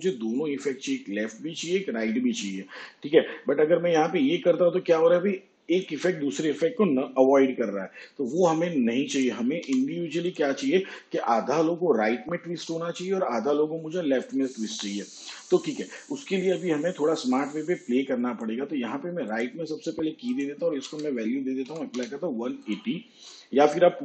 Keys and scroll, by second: 9.7 0, 20.8 1, 21.7 8.